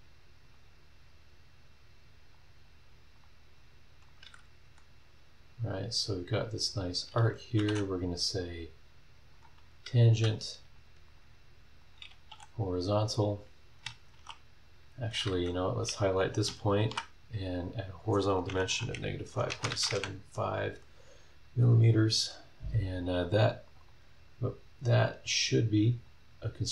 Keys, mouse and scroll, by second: 0.4 click, 2.3 click, 3.1 click, 4.1 click, 4.6 Escape, 5.7-6.9 drag, 7.6 t, 8.3 click, 8.6 middle click, 9.3 click, 9.6-10.7 middle drag, 10.1 Escape, 10.7 click, 11.1 click, 11.8 click, 12.4 h, 14.1 shift+v, 15.3 Escape, 15.8 click, 16.7 shift+h, 18.7 KP_Subtract, 19.2 KP_5, 19.5 KP_Decimal, 19.7 KP_7, 19.8 KP_5, 19.9 KP_Enter, 22.1 Escape, 23.6 click, 24.3 scroll down 1, 24.8 scroll up 1, 26.0 click.